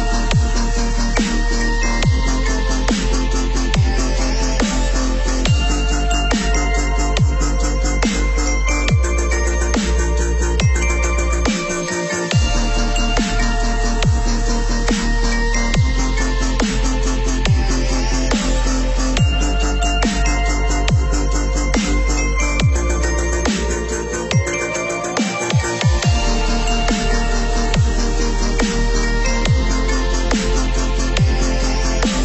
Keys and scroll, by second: 11.7 ctrl+=, 23.5 ctrl+-.